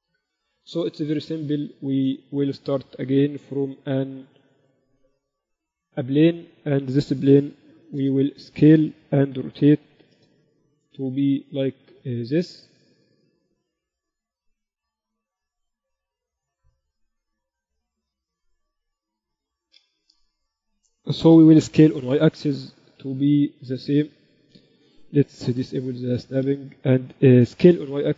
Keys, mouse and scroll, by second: 0.3 middle click, 1.0 Tab, 3.4-4.8 drag, 3.6 shift+a, 8.0 s, 9.8 r, 14.5-16.7 drag, 16.8 click, 19.8 KP_7, 22.1 s, 25.5 shift+Tab.